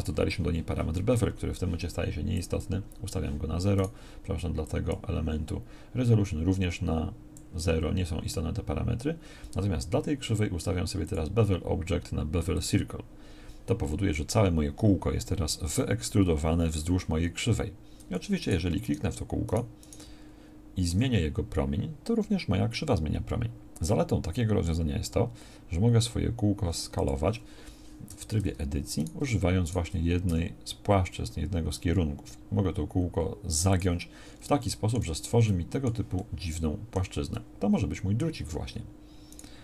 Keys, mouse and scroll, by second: 20.9 s, 28.1 Tab, 30.3 s, 35.0 z.